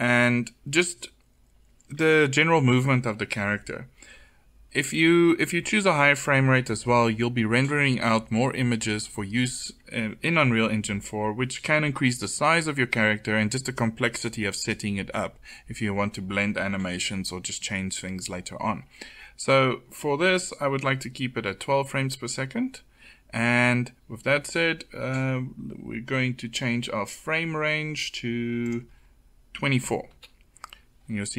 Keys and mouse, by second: 28.6-30.5 drag.